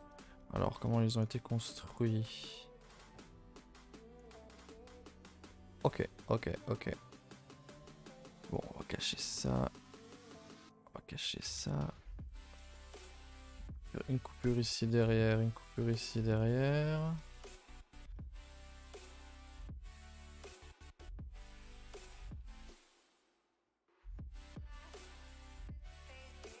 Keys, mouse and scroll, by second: 0.3 middle click, 1.2 scroll up 4, 1.5-2.5 shift+middle drag, 2.5-3.1 scroll up 7, 3.1-4.1 middle drag, 4.1-4.5 scroll up 2, 4.5 middle click, 5.2 scroll down 2, 5.5-7.8 middle drag, 7.8 a, 7.9 a, 8.1 middle click, 9.0 l, 9.2-9.8 scroll down 3, 9.8 middle click, 10.0-10.3 scroll down 2, 10.3-11.6 shift+middle drag, 11.6-13.6 typing, 12.4 shift+middle click, 12.9-13.2 scroll up 5, 14.0 alt+click, 14.3 scroll down 2, 14.4-15.7 shift+middle drag, 15.7 alt+shift+click, 17.2 right click, 17.4-18.7 shift+middle drag, 18.7 scroll up 2, 19.1-22.1 middle drag, 22.2 a, 22.4 a, 22.6-24.1 middle drag, 24.1-24.8 scroll up 7, 24.8-26.0 middle drag, 26.0-26.6 scroll down 2.